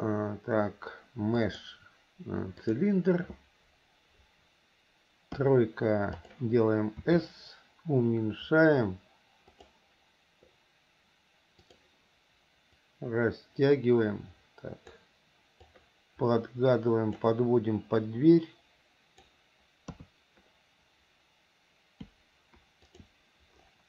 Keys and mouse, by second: 5.5 KP_3, 6.4 click, 7.2 s, 11.8 click, 12.9 click, 13.1-15.1 drag, 15.8-17.5 drag, 18.1-19.4 drag, 20.0 KP_3.